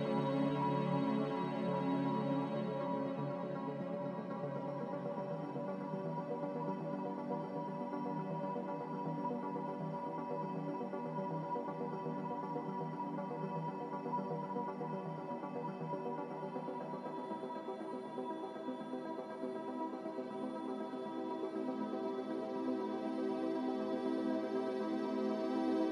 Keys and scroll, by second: 8.0 n, 9.3 b, 23.6 n.